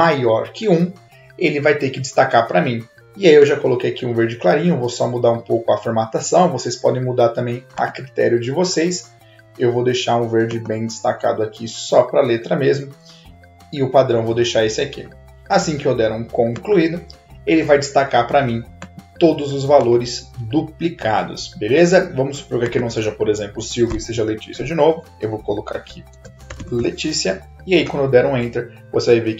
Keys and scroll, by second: 25.5-27.2 typing, 27.7 Return.